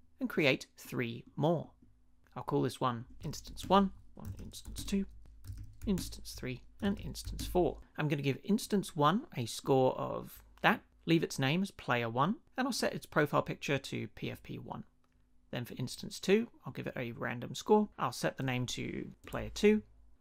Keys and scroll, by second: 2.9-7.7 typing, 19.1 Right, 19.2 BackSpace, 19.3 2.